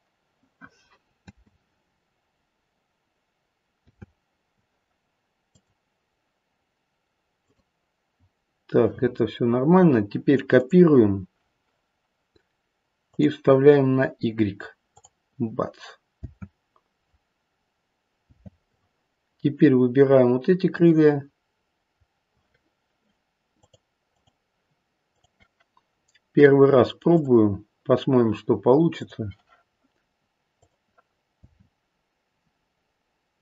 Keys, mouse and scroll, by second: 1.1 space, 3.8 space, 5.4 click, 7.4 click, 10.6 click, 13.0 click, 14.9 click, 16.1 space, 18.3 space, 20.6 click, 23.6 click, 24.1 click, 25.0 click, 27.0 click, 28.9 click, 30.5 click, 31.3 space.